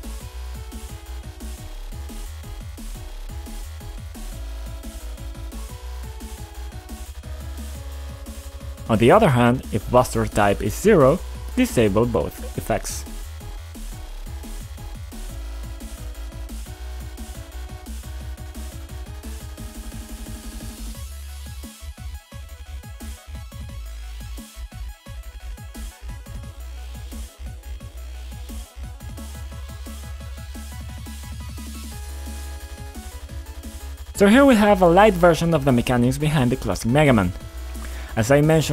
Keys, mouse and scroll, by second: 1.1 click, 7.0 click, 7.8 click, 7.8 b, 10.9 click, 11.2 click, 11.4 ctrl+click, 12.5 click, 12.6 double click, 14.0 click, 15.0 click, 15.8 click, 16.9 click, 18.1 click, 18.2 click, 18.4 shift+click, 18.4 shift+double click, 18.7 click, 19.0 click, 19.1 shift+click, 19.4 shift+double click, 19.7 ctrl+c, 20.6 click, 22.3 click, 22.3 click, 22.9 ctrl+v, 23.6 click, 24.6 click, 25.7 F5, 27.5 click, 29.0-34.3 typing, 35.3-38.7 typing.